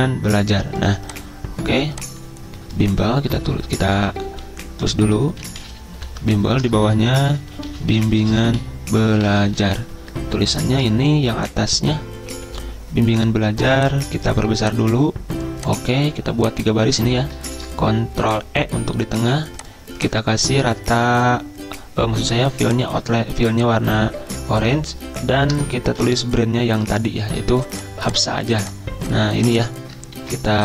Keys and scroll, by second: 3.6-9.2 typing, 6.6 Return, 10.9 typing, 17.5 ctrl+e, 25.5 Return, 30.2 ctrl+c.